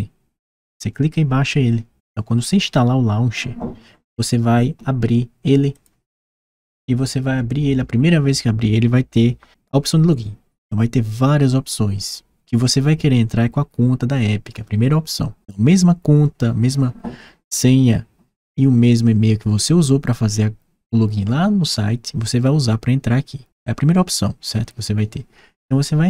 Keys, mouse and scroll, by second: 5.5 click.